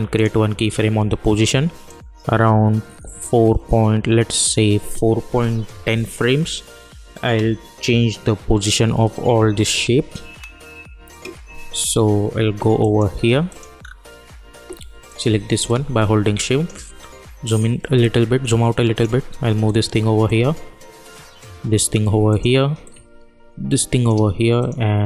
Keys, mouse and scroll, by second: 12.7 click, 13.7 scroll up 1, 15.0-16.9 drag, 16.9 scroll down 1, 17.7-24.5 drag.